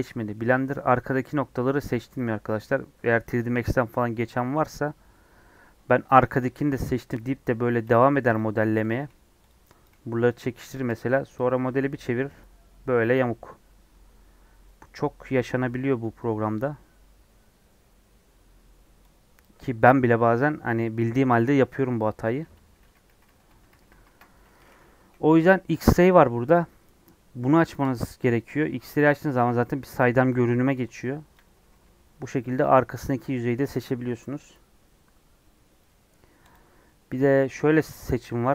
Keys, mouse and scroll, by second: 0.7 scroll up 1, 4.5 KP_1, 7.9 g, 9.0 click, 9.1 g, 9.8 click, 9.9 g, 10.7 click, 10.9 g, 11.5 scroll down 1, 11.6-22.6 middle drag, 22.6 ctrl+z, 22.8 ctrl+z, 23.2 ctrl+z, 23.5 ctrl+z, 23.7 ctrl+z, 23.9 ctrl+z, 24.4 middle click, 24.9 KP_1, 27.9 click, 28.5-29.3 scroll up 2, 29.4 click, 30.3-30.9 scroll up 2, 31.3 click, 31.6 g, 36.1 scroll down 3, 36.5 click.